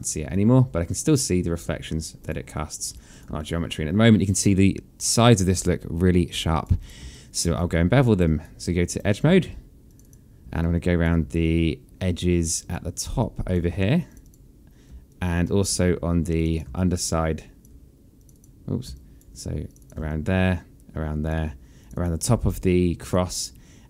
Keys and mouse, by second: 0.1 alt+click, 2.0 click, 2.3 alt+click, 3.2 alt+click, 6.6 click, 6.9 alt+click, 8.2 right click, 9.7 click, 10.4 shift+click, 11.2 alt+click, 13.0 alt+click, 13.9 shift+click, 14.9 alt+click, 16.2 shift+click, 16.5 alt+click, 18.0 click, 18.7 alt+click, 19.5 shift+click, 19.9 alt+click, 21.6 shift+click, 22.9 alt+click.